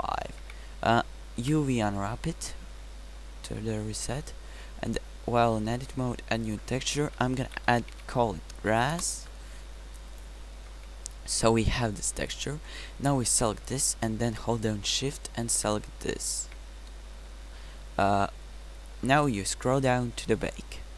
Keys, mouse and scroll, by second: 0.6 Tab, 1.5 u, 8.8 s, 10.8 Tab.